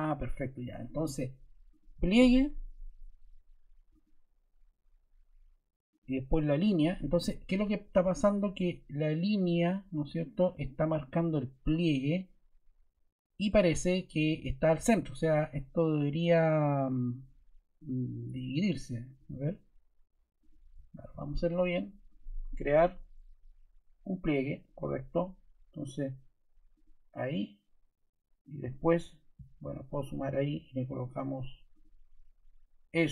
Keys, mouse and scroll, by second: 5.8 click.